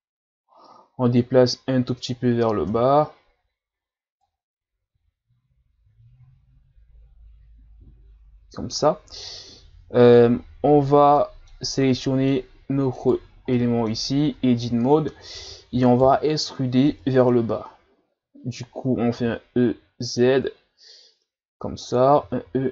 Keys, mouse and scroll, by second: 2.7 KP_1, 4.2 click, 9.3-10.6 scroll up 2, 11.2-12.7 middle drag, 12.7 Tab, 13.0 right click, 13.5 middle click, 14.2 Tab, 14.6-15.9 middle drag, 15.9 alt+right click, 16.9 KP_1, 19.2 e.